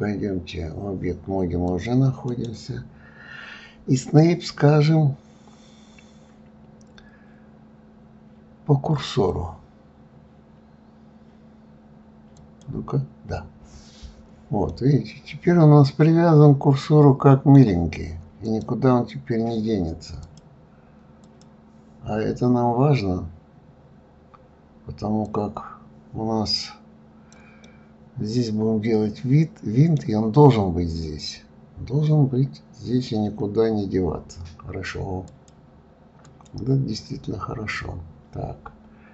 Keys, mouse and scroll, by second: 1.6 click, 2.2-14.6 right drag, 14.6-17.7 middle drag, 18.4 click, 20.2 click, 21.2-21.6 drag, 25.2 click, 27.6-30.6 middle drag, 32.4-33.1 scroll down 3, 33.1-34.0 scroll up 3.